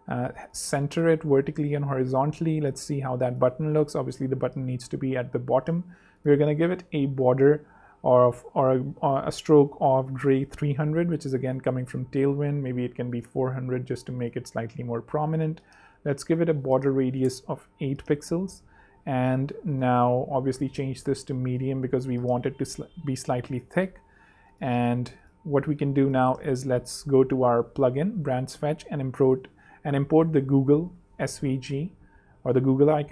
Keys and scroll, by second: 2.0 super+3, 2.8 super+2, 3.8 super+Down, 4.2 super+Down, 4.3 super+3, 4.8 super+2, 6.3-9.2 typing, 10.3 Return, 10.9 super+Return, 11.0 super+3, 12.1 super+2, 14.6 super+3, 15.3 super+2, 17.0 8, 17.2 Home, 17.4 super+3, 18.5 super+2, 18.8 super+z, 22.0 super+3, 22.8 super+2, 25.1 alt+z, 27.1 shift+super+p, 27.3-30.7 typing, 30.3 super+g, 30.9 Return.